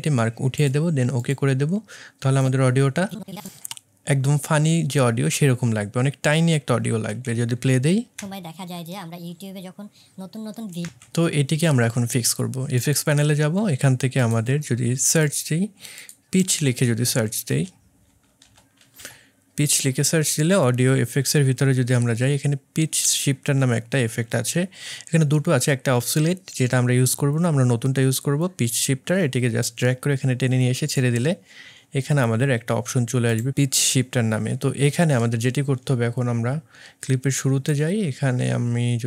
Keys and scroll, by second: 8.1 space, 10.8 space.